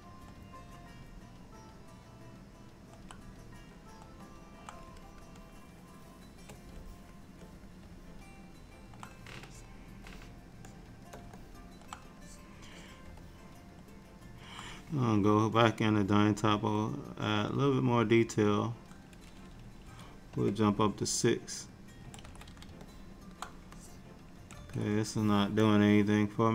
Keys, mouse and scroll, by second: 3.6 click, 4.3 middle click, 5.1 shift+click, 5.5 click, 6.0 click, 6.9 click, 7.5 click, 8.1 middle click, 9.6 shift+click, 10.2 click, 11.1 shift+click, 11.5 middle click, 12.3 click, 12.8 click, 13.3 middle click, 15.7 click, 16.3 click, 21.1 click, 22.3 ctrl+z, 22.9 middle click, 23.8 click, 24.7 ctrl+z, 25.7 click.